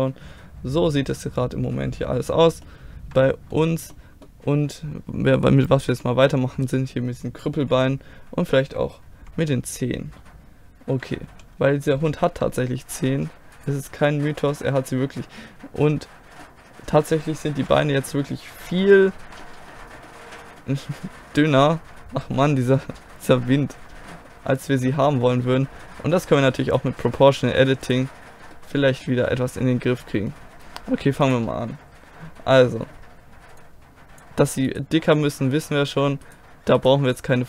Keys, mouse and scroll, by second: 0.3-2.6 middle drag, 3.2-9.2 middle drag, 9.2 KP_1, 11.3 KP_5, 12.2 middle click, 12.4 middle click, 13.6-15.1 right drag, 15.1 click, 15.2-17.5 middle drag, 17.5 KP_3, 18.6 KP_1, 22.9-24.3 middle drag, 27.8 click, 28.5-29.7 middle drag, 31.2 middle click, 32.0 click, 33.0 right click, 33.1 middle click, 33.6-34.7 drag.